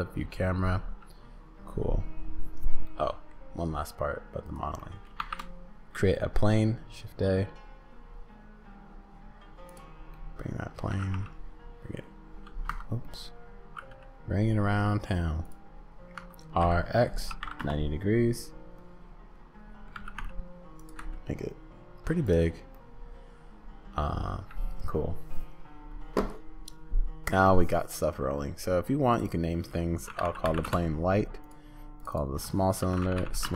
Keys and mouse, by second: 2.9 middle click, 4.4 click, 4.8 middle click, 5.2 shift+a, 9.8 click, 9.8-10.9 middle drag, 9.8 right click, 10.8 click, 10.8 right click, 10.9 g, 13.2 click, 13.7 g, 16.1 r, 18.9-19.9 drag, 19.9 g, 21.0 s, 22.2-24.2 drag, 22.2 middle click, 22.2 right click, 29.1 click, 29.3-31.2 drag, 31.4 click, 32.0 click, 32.1-33.5 drag, 33.2 l.